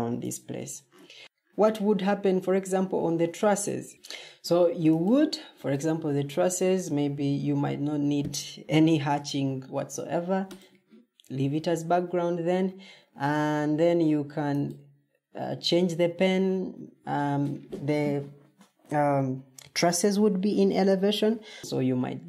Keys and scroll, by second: 0.5 Escape.